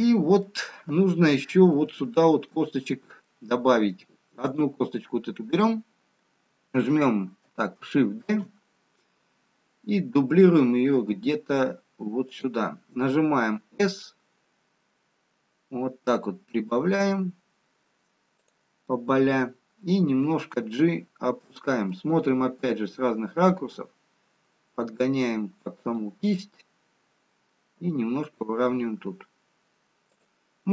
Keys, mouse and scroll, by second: 1.1 middle click, 1.1-1.6 scroll down 2, 2.5 shift+middle click, 4.4 middle click, 4.4 click, 4.4 scroll up 2, 5.8-7.1 scroll down 3, 8.2 shift+d, 13.6 s, 20.5 g, 22.0 middle click, 24.2 g, 26.3 middle click, 28.6 g.